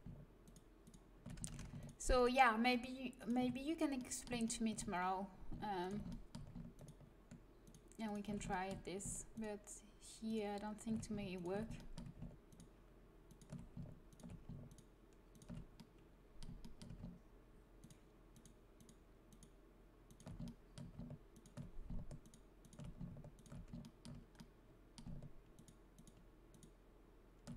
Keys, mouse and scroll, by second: 0.4-1.5 right drag, 1.5 ctrl+z, 4.0 middle click, 4.8-10.2 middle drag, 10.2-11.3 right drag, 11.7 middle click, 12.5-14.0 right drag, 14.0 click, 14.9 right click, 15.5-16.8 middle drag, 19.8 right click, 20.4-23.3 drag, 20.6-27.5 right drag, 23.8 click.